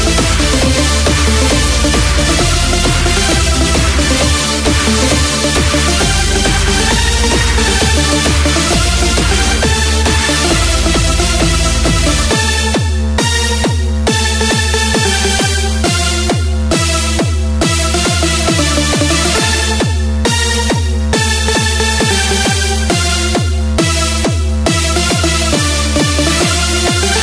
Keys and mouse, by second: 0.8 KP_6, 1.5 KP_6, 2.8 KP_6, 3.5 KP_6, 4.1 KP_6, 10.1 x, 16.8 KP_4, 17.5 KP_4.